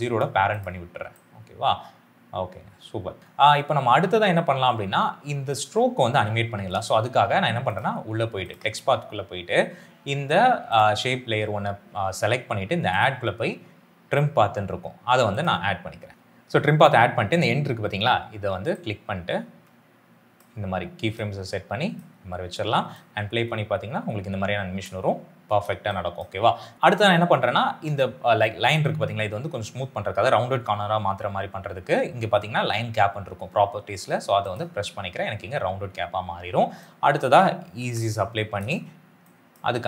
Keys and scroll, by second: 3.2 space, 22.9 space, 37.7 F9.